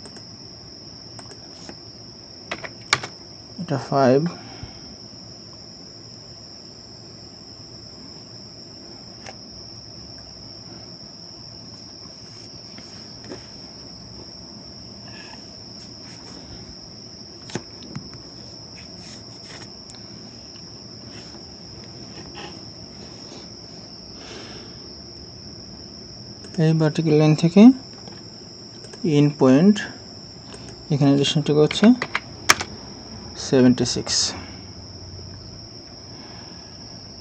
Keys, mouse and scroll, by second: 2.5 5, 2.9 Return, 31.7-32.0 typing, 32.5 Return.